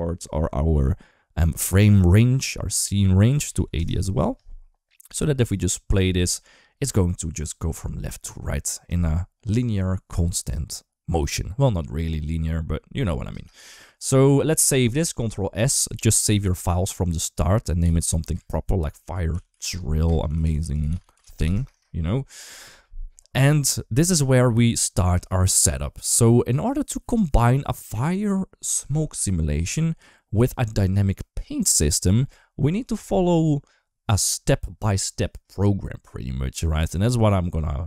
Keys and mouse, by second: 5.4 click, 5.8 space, 13.1 space, 13.4 ctrl+s, 22.6 shift+middle click.